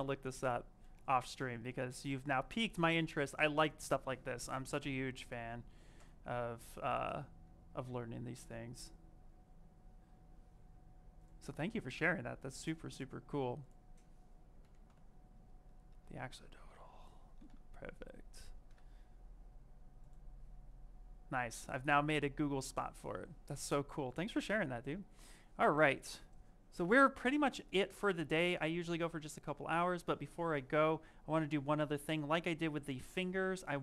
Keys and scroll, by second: 5.8 space, 28.0 shift+f.